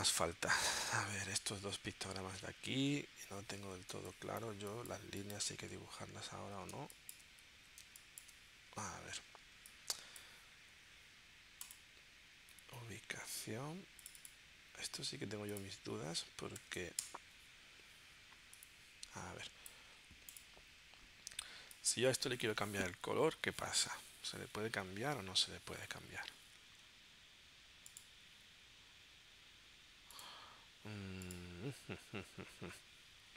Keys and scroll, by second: 2.7 super+Tab, 3.9 space, 6.7 space, 7.8 space.